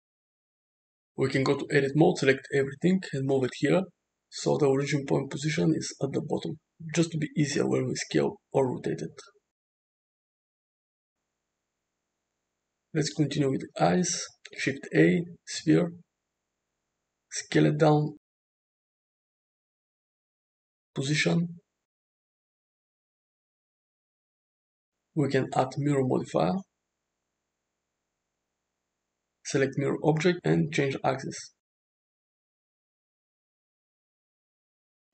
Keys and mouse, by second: 0.6 click, 1.8 Tab, 2.3 a, 3.2 g, 4.3 Tab, 4.7 g, 5.8 r, 6.6 Tab, 7.4 click, 7.8 shift+d, 9.1 s, 10.1 g, 10.6 s, 13.5 alt+z, 14.4 shift+a, 16.6 s, 19.3 `, 20.8 g, 23.0-23.8 middle drag, 24.6-25.9 right drag, 26.5-28.1 drag, 29.4 click, 31.8 click, 32.5 click, 33.0-34.9 middle drag.